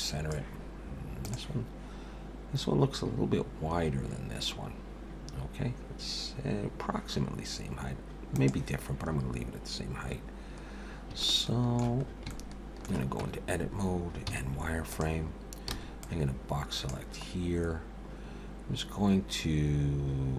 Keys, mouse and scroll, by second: 11.2 shift+middle click, 12.0 scroll up 3, 12.3 shift+middle click, 13.2 Tab, 14.3 z, 15.7 b, 17.9-18.7 scroll up 1.